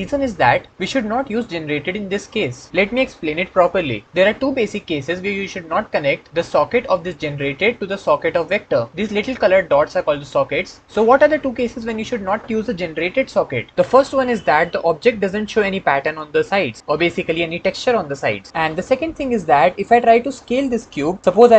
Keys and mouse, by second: 13.7-14.8 middle drag, 15.6-15.9 middle drag, 16.2 middle click, 18.6 ctrl+middle click.